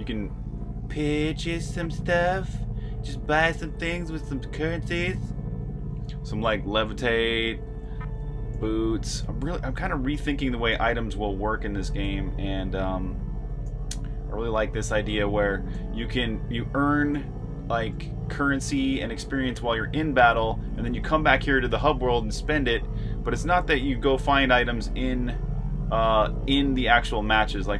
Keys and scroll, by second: 0.0-4.4 typing, 7.4-8.8 typing, 10.0-13.7 typing, 15.1-17.8 typing, 18.9-24.4 typing.